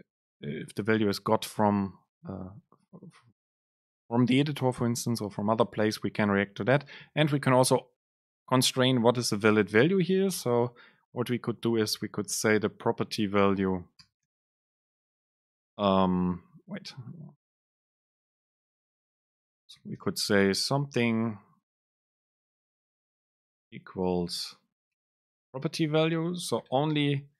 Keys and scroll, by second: 10.6 Return, 12.9 Return, 13.0 super+space, 15.5 BackSpace, 16.6 End, 17.0 BackSpace, 23.1 Right, 24.4 super+space, 26.0 BackSpace, 27.1 super+space.